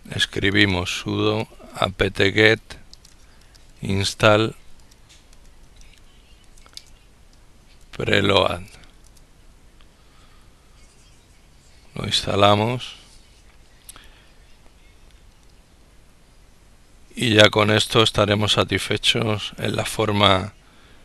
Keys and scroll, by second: 0.0 ctrl+s, 0.1 ctrl+u, 0.3 ctrl+d, 0.5 ctrl+o, 0.8 ctrl+a, 1.0 ctrl+p, 1.2 ctrl+t, 1.5 ctrl+g, 1.9 ctrl+e, 2.0 ctrl+t, 2.3 ctrl+space, 2.8 ctrl+n, 3.0 ctrl+s, 3.2 ctrl+t, 3.4 ctrl+a, 3.7 ctrl+l, 4.2 ctrl+l, 4.7 ctrl+p, 5.0 ctrl+l, 5.2 ctrl+e, 6.7 ctrl+r, 6.7 ctrl+e, 7.2 ctrl+l, 7.2 ctrl+o, 7.4 ctrl+a, 7.7 ctrl+o, 8.5 ctrl+Return.